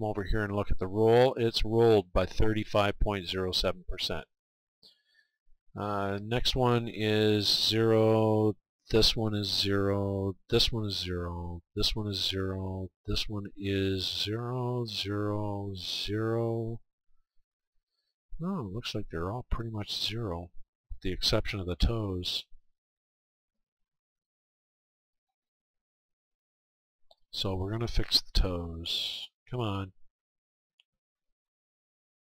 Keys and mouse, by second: 6.2-8.2 right drag, 8.8 right click, 9.9-16.1 right drag, 16.5-22.3 right drag, 22.5-28.4 right drag, 28.7-31.3 right drag, 30.2-31.7 middle drag.